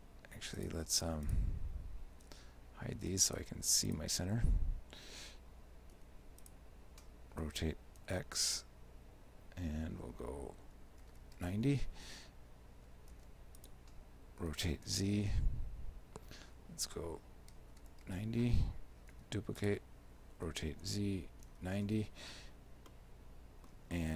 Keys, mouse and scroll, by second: 0.6 right click, 1.0 shift+right click, 1.3 right click, 2.3 h, 3.3 right click, 3.9 shift+right click, 6.0 shift+d, 7.4 r, 13.2 shift+d, 14.5 r, 19.2 shift+d, 20.4 r, 22.9 shift+middle click, 24.0 middle click.